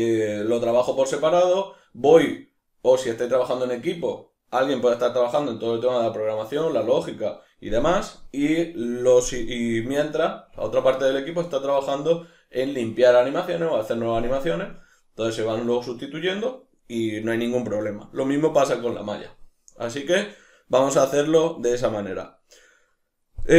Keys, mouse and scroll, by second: 17.2-23.5 middle drag.